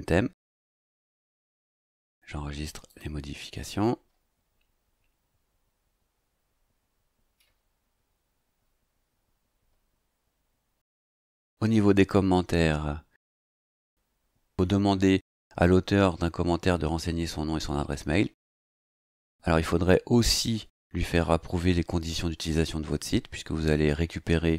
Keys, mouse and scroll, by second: 2.9 click, 11.0 click.